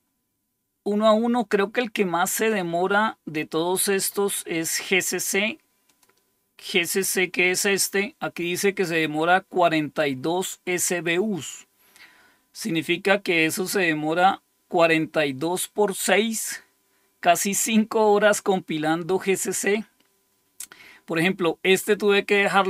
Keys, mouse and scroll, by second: 0.7-1.6 scroll down 2, 3.7-4.3 scroll down 2, 4.3 scroll down 1, 5.8 click, 9.2 click, 10.5 click.